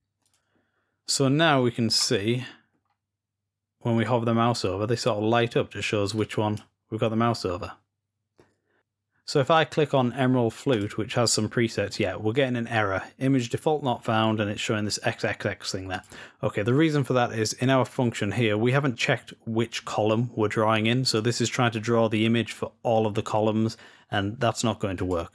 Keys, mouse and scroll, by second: 0.0-1.7 drag, 1.7-2.5 scroll down 2, 2.5-4.7 scroll down 1, 5.9-7.2 drag, 7.4-8.8 scroll up 2, 10.6-13.0 drag, 15.8 click, 20.9 click.